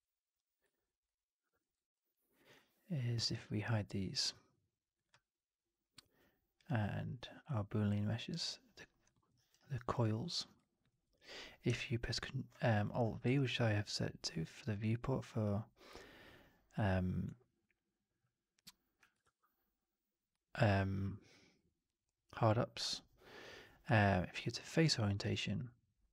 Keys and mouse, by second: 1.0-1.3 alt+drag, 1.5 alt+middle drag, 1.6 alt+right click, 1.8-2.3 alt+drag, 6.5 click, 8.2 click, 9.0 alt+middle drag, 9.2 alt+right drag, 9.5 alt+right drag, 9.8 alt+click, 13.1 alt+v, 19.1 alt+v.